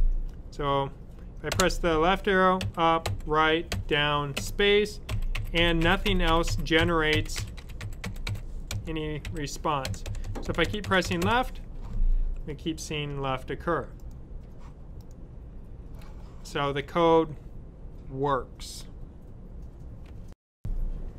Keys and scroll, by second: 1.4 Left, 5.3-11.1 typing.